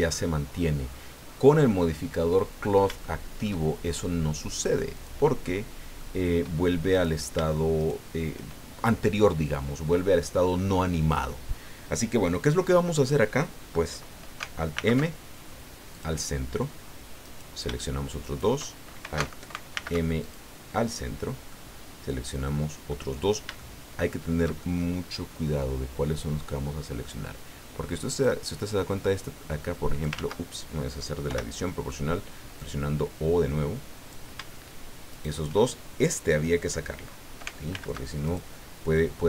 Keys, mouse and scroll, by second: 2.0 scroll up 1, 3.0 shift+middle click, 4.9 click, 5.4 middle click, 6.9 right click, 7.8 shift+right click, 14.7 alt+m, 15.9 click, 17.2 right click, 18.2 shift+right click, 19.7 alt+m, 20.2 alt+click, 21.0 middle click, 22.4 middle click, 23.1 scroll up 1, 23.6-27.2 shift+middle drag, 28.1 right click, 29.1-30.3 drag, 30.1 ctrl+z, 31.3 o, 32.6-34.3 drag, 35.1 shift+right click, 37.7 alt+m, 38.2 alt+click.